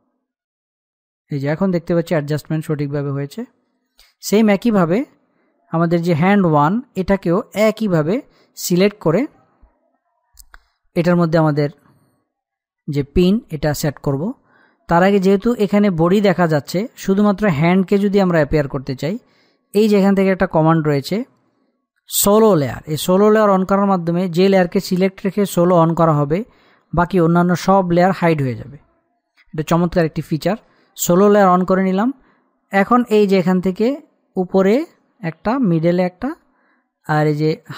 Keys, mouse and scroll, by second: 0.1 click, 4.4 click, 5.6-5.9 scroll down 1, 6.9-10.6 drag, 22.5 click, 23.8-26.9 middle drag, 34.9 click.